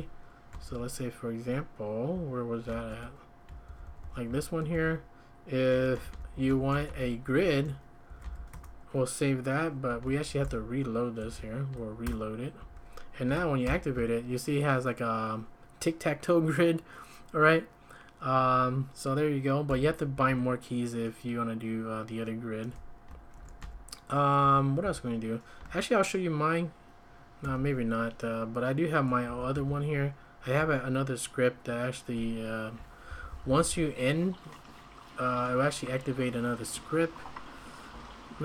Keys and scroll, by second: 0.0-0.7 typing, 2.1-2.6 typing, 2.9 ctrl+d, 3.6-8.9 typing, 7.4 Escape, 10.2 ctrl+a, 10.2-12.6 typing, 12.0 Return, 13.6 ctrl+;, 13.6-14.6 typing, 19.7 Escape, 20.1 `, 23.3 ctrl+a, 23.6 x, 24.4 j, 24.8 k, 29.2 j, 29.5 l, 30.5-33.8 typing.